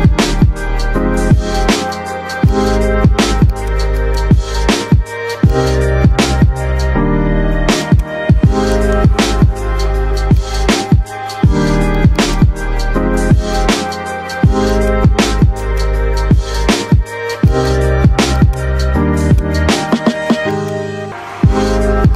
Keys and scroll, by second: 20.8 F3, 21.6 Escape.